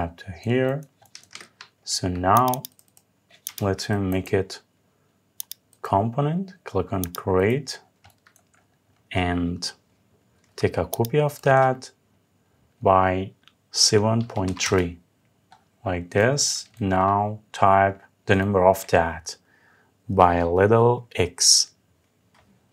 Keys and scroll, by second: 1.0 Escape, 14.3 Return.